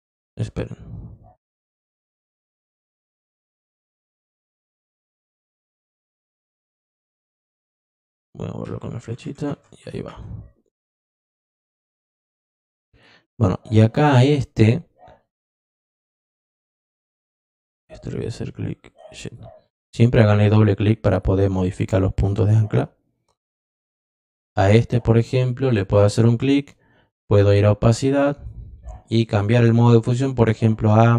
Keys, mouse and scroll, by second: 0.3 ctrl+z, 1.4 click, 2.7 click, 5.2 click, 6.4-7.8 drag, 11.4 click, 12.9 click, 15.7 click, 17.7-19.3 drag, 19.8 click, 20.4 click, 23.5 click, 24.4 click, 27.1 click, 29.2 click.